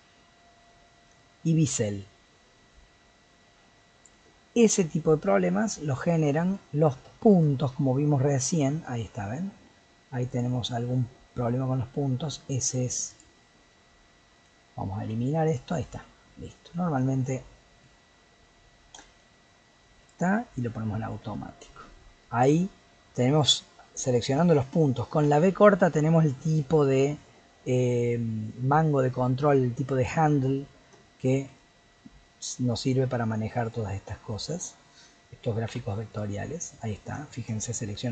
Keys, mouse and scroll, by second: 1.2-4.2 shift+drag, 5.6-6.9 middle drag, 6.9 scroll up 1, 7.1-7.9 shift+middle drag, 7.9 Tab, 8.3-10.3 middle drag, 10.3 click, 11.6 g, 13.1 click, 13.7 g, 15.0 x, 16.0-17.2 middle drag, 17.2 click, 17.5-18.9 middle drag, 18.9 v, 21.2 Tab, 21.7-22.4 middle drag, 22.4 Tab, 24.0 click, 25.2 v, 31.0-32.7 shift+middle drag, 32.7 click, 33.6 click, 35.7 x, 36.7 click, 37.3 shift+click.